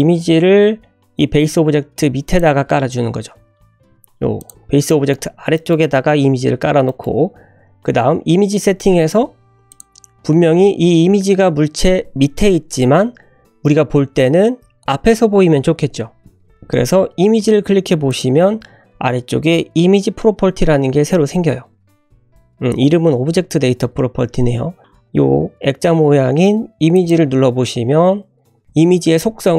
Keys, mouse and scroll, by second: 2.6 `, 3.8 g, 4.5 scroll up 2, 4.9-5.4 middle drag, 5.5 shift+middle click, 6.5-6.9 scroll down 2, 6.8-7.2 middle drag, 7.2 `, 8.2 scroll up 2, 8.7-9.1 shift+middle drag, 9.1 scroll down 1, 9.7 click, 16.5 click, 18.0 click, 26.9 click.